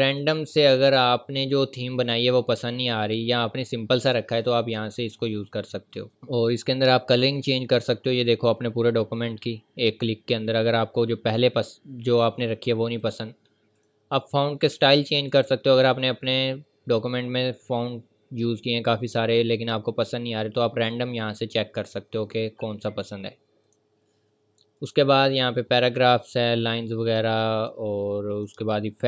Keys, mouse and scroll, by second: 4.4 click, 11.3-11.8 scroll up 1, 13.0 click, 17.1-17.5 scroll down 1, 21.7-22.0 scroll down 1, 23.6 click, 27.6 click.